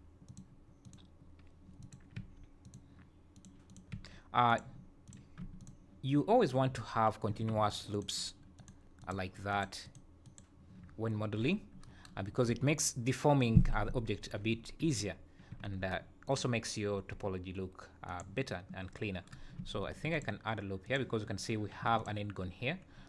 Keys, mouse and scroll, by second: 0.8 click, 1.8 click, 2.1 g, 3.3 click, 3.7 click, 3.9 g, 5.0 click, 5.6 shift+click, 6.6 scroll down 6, 7.3 3, 9.0 alt+click, 9.6 alt+click, 9.8 alt+click, 10.3 alt+click, 11.4 scroll up 5, 15.5 1, 15.7 scroll up 3, 16.2 click, 18.0 click, 18.4-18.9 scroll down 3, 19.8 ctrl+r, 21.8 3, 21.9 click.